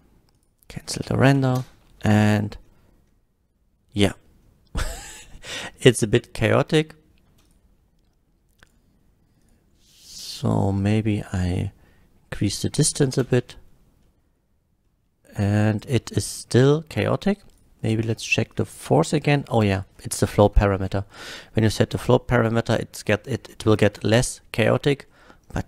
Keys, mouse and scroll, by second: 0.4 shift+click, 0.7 shift+click, 1.2 shift+Left, 1.6 space, 2.7 shift+Left, 2.7 middle drag, 5.7-6.7 middle drag, 7.4 space, 7.4 click, 8.0 space, 8.7 click, 9.4 click, 10.6 click, 11.5 click, 13.2 space, 13.7 shift+Left, 14.0-14.4 middle drag, 14.9-15.9 middle drag, 16.4 middle drag, 17.5 click, 18.5 click, 19.5 space, 20.8 F12, 25.1 middle click.